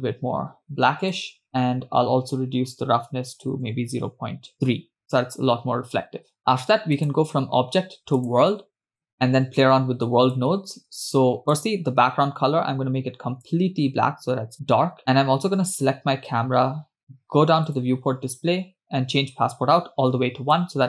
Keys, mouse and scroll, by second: 1.5-4.9 drag, 7.0-8.3 drag, 10.4 click, 11.6 click, 15.9 click, 18.6 click, 18.7-19.5 scroll down 2, 19.6-20.8 drag.